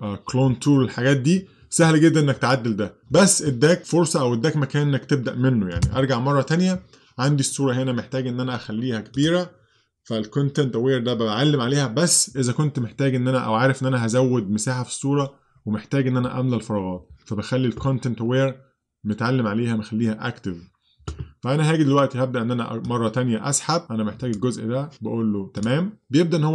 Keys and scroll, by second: 5.9 super+z.